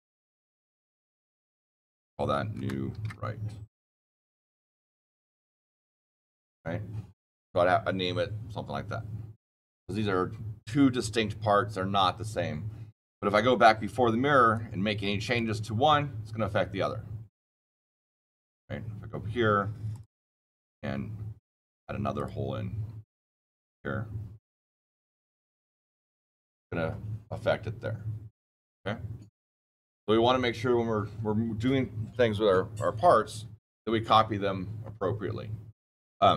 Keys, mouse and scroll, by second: 0.2 BackSpace, 0.7 click, 1.2 click, 1.9 click, 2.5-3.4 typing, 4.5 Return, 4.9 click, 14.4 click, 16.5-18.9 drag, 19.8-22.1 drag, 23.1 click, 24.4 click, 25.4 click, 26.3 click, 36.2 click.